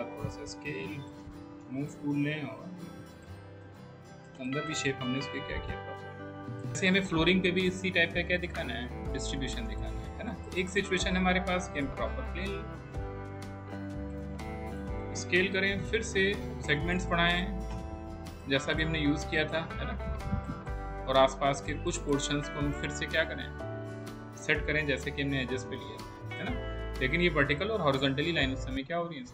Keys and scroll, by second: 1.7 w, 13.5 r.